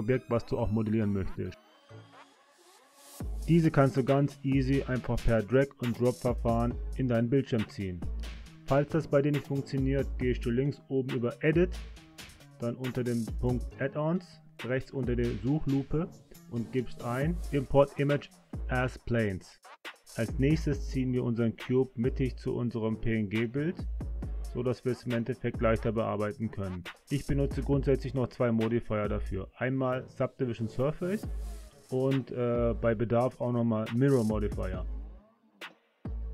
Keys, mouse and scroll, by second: 9.7-12.7 drag, 20.0-21.1 drag, 23.6 click, 24.2 click, 25.2 click, 28.5 click, 29.7-32.0 drag, 34.0 shift+middle click, 35.9 click.